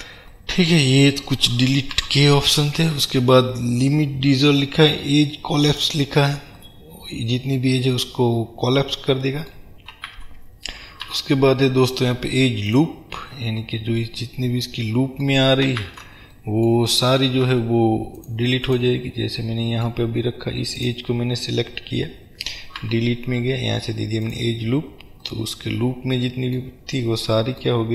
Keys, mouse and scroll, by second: 2.1 Delete, 6.6 middle click, 7.6-17.4 middle drag, 10.2 ctrl+z, 11.2 Delete, 15.9 ctrl+z, 17.4 ctrl+r, 18.8 click, 19.6-20.8 middle drag, 20.8 click, 22.9 Delete, 25.4-27.9 middle drag.